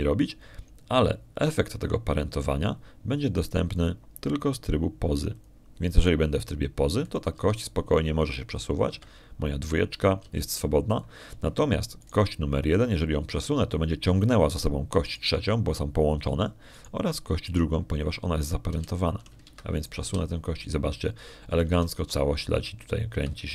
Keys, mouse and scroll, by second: 5.6 click, 7.2 click, 8.9 right click, 9.2 g, 10.7 Escape, 12.1 g, 12.8 click, 13.9 right click, 16.9 right click, 18.6 right click, 19.3 right click, 20.5 g, 21.3 Escape, 21.6 right click, 21.9 g.